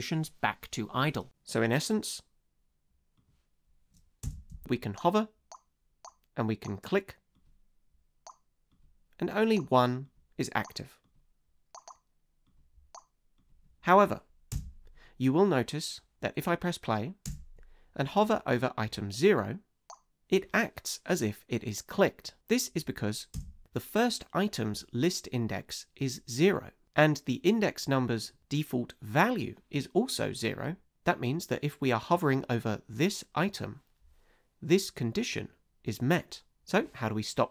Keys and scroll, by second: 4.2 space, 14.5 space, 17.2 space, 23.3 space.